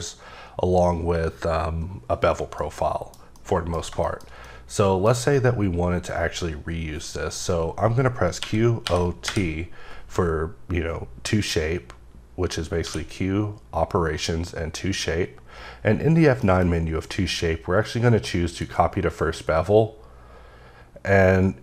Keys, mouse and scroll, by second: 2.6 middle click, 3.4 middle click, 3.8 scroll down 2, 4.0 shift+middle click, 8.4-9.2 typing, 12.9 q, 16.4 F9, 18.5 click.